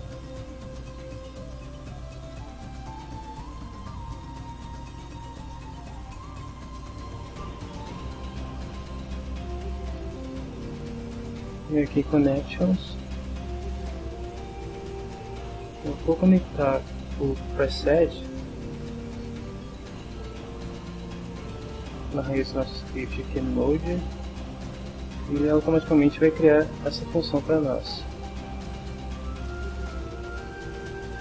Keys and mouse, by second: 0.5 click, 1.4-2.4 typing, 3.2 click, 4.3 b, 4.5 2, 4.8 Return, 5.7 click, 6.3 click, 7.1 click, 8.5 click, 12.3 click, 13.8 click, 19.3 click, 21.3 click, 27.5 click, 29.3-30.3 drag, 30.5 click, 31.1 click.